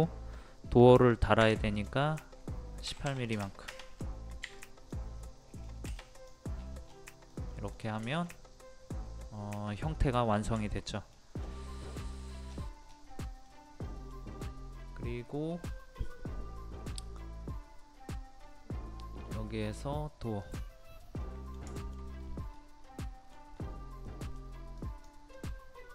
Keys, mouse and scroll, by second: 1.4 p, 1.7 click, 2.8 KP_1, 4.6 click, 5.3 scroll up 1, 5.3-6.0 scroll down 1, 6.1 click, 6.5-6.8 scroll down 1, 7.3 middle click, 7.7-8.0 scroll up 1, 9.9-11.1 middle drag, 11.1 scroll down 1, 11.8 middle click, 12.1 scroll down 1, 13.5 middle click, 14.3-18.4 scroll up 1, 20.4 click, 21.2 middle click, 21.8 shift+middle click, 22.1-22.5 scroll up 1, 22.8 middle click, 23.5 scroll up 1, 24.1 middle click, 24.8 click, 25.3 middle click.